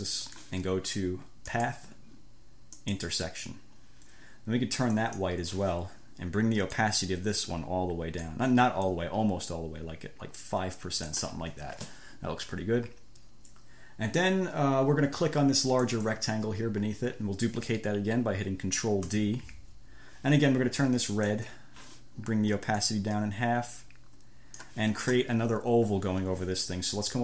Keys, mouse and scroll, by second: 1.8 click, 3.0 click, 5.2 click, 7.0-8.7 drag, 9.1-11.5 drag, 16.1 click, 19.3 ctrl+d, 21.3 click, 21.7 scroll up 2, 23.1-25.1 drag.